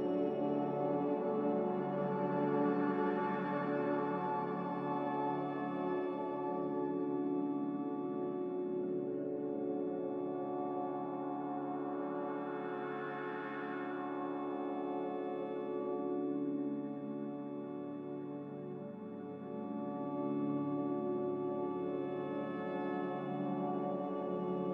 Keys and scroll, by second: 1.3-2.0 typing, 11.4 typing, 16.9-17.8 typing.